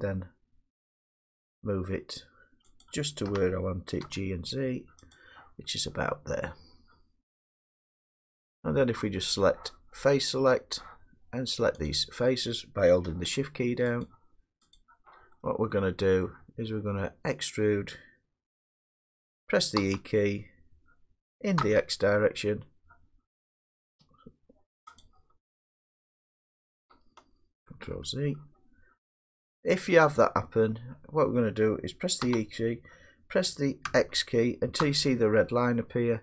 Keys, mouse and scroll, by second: 2.8 click, 3.3 g, 4.0 z, 5.1 click, 5.6-6.2 middle drag, 6.3 click, 7.2 click, 7.5 middle click, 7.5 middle click, 12.5 click, 14.1 shift+click, 15.3 middle click, 15.4 middle click, 16.0 scroll down 1, 16.2 scroll down 4, 19.8 e, 20.4 scroll, 21.6 x, 25.0 click, 26.0 middle click, 27.7 ctrl+z, 29.2 middle click, 31.2 middle click, 32.2 e, 33.9 x, 34.8 x.